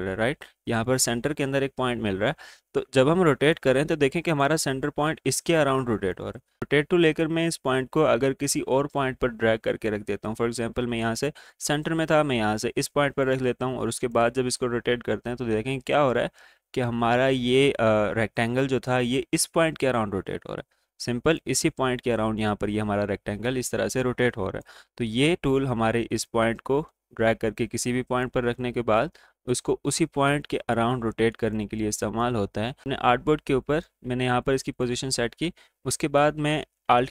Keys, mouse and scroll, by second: 3.8-31.4 drag, 31.4 space, 31.7 click, 32.0 space, 32.5-37.1 drag.